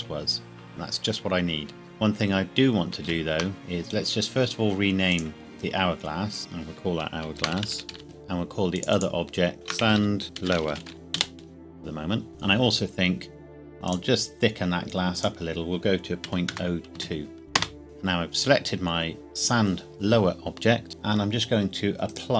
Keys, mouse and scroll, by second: 2.7 ctrl+Num_Lock, 2.7-3.1 scroll down 1, 3.1 ctrl+z, 3.5 click, 7.4-7.9 typing, 8.0 Return, 8.7 click, 9.7-11.6 typing, 12.3 click, 16.2 KP_Decimal, 16.5 KP_0, 16.9 KP_2, 17.5 KP_Enter, 17.8 click, 22.1 click.